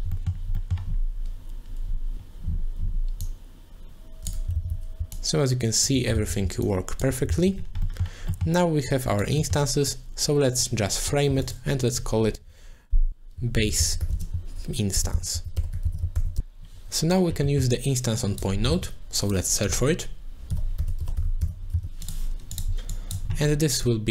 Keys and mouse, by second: 0.2 middle click, 0.7 middle click, 3.2-4.3 drag, 4.6 ctrl+z, 5.1 shift+click, 6.1 ctrl+z, 6.7 shift+click, 7.3 ctrl+z, 8.1 middle click, 8.5 middle click, 8.9 click, 9.6 middle click, 9.9 click, 11.3 ctrl+j, 11.5 click, 11.8 click, 12.4 F2, 17.5 middle click, 18.2 click, 18.8 shift+a, 22.9 click, 23.8 click.